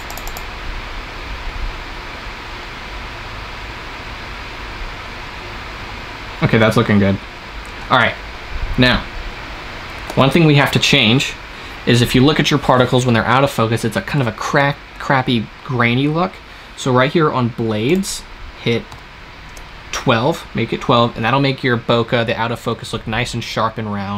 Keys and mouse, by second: 0.8-2.4 drag, 10.9 shift+z, 17.7-19.6 drag.